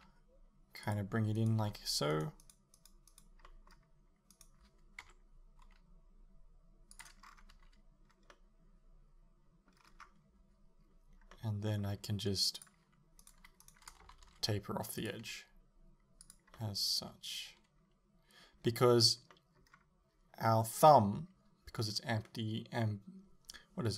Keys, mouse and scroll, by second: 0.0 g, 1.0 click, 1.4 right click, 1.7 g, 2.4 right click, 2.8 right click, 3.1 right click, 3.5 middle click, 4.4 right click, 5.1 KP_7, 5.7 g, 7.3-7.6 scroll down 1, 7.6 a, 8.1 scroll down 1, 8.4-12.6 middle drag, 9.9-11.4 scroll up 1, 12.6 click, 13.2 right click, 13.7 shift+right click, 14.1 s, 15.1 click, 15.3 g, 16.4 click, 16.6-23.9 middle drag.